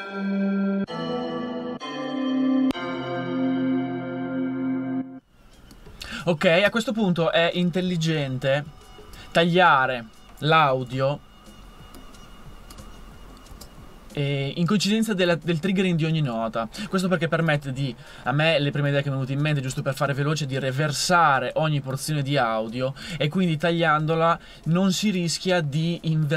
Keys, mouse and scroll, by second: 3.1-8.3 drag, 8.3 super+2, 8.7 super+2, 10.9 super+e, 13.5 super+e, 15.6 super+e, 17.6 super+e, 19.7 super+e.